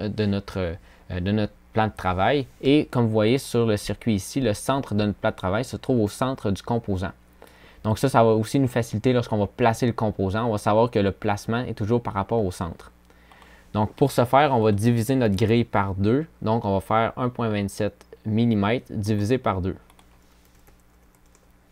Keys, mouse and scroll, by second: 19.7 click.